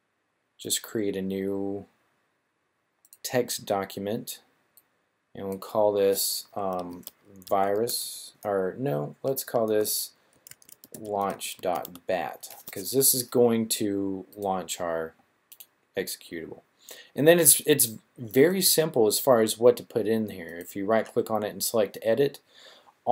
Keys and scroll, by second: 6.8-9.1 typing, 10.6-11.8 typing.